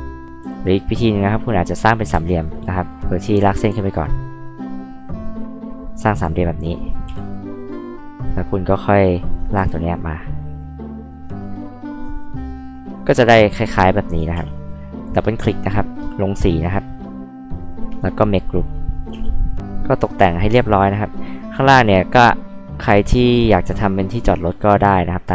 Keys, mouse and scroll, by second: 0.4 Escape, 2.1 ctrl+z, 2.9 click, 4.3 click, 5.2 click, 5.4-5.8 scroll up 2, 5.9 click, 6.2 scroll down 2, 6.7 click, 7.1 e, 7.2 click, 8.6-9.2 scroll up 4, 9.5 p, 9.9 click, 14.3 space, 14.6 click, 14.8 click, 15.1 click, 15.3 click, 16.8 click, 18.6 click, 19.1 space, 19.3 click, 19.4 drag, 19.9 click, 20.7 click, 21.1 click, 23.1 click.